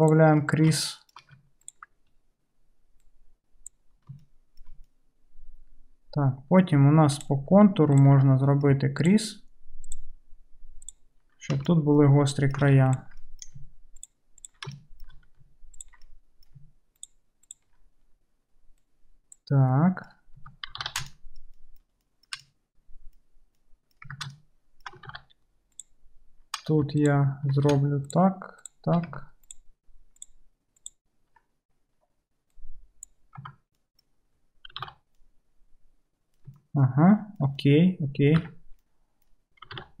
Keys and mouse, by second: 1.7 ctrl+click, 1.8-3.1 ctrl+middle drag, 3.1-7.3 drag, 7.3 middle click, 8.0 ctrl+click, 8.1-9.9 ctrl+middle drag, 9.9 ctrl+click, 10.0 ctrl+middle click, 10.8 ctrl+click, 11.0-12.9 ctrl+middle drag, 12.9 ctrl+click, 13.0-17.5 ctrl+middle drag, 17.5 ctrl+click, 17.6-18.9 ctrl+middle drag, 18.9-21.5 drag, 20.4 Tab, 20.9 alt+z, 21.5-24.0 shift+middle drag, 24.0-25.8 drag, 24.1 Tab, 25.2 alt+z, 25.8-29.6 middle drag, 29.5 ctrl+click, 30.4-32.6 ctrl+middle drag, 32.6-40.0 drag, 33.5 Tab, 34.8 alt+z, 38.5 Tab, 39.8 alt+z.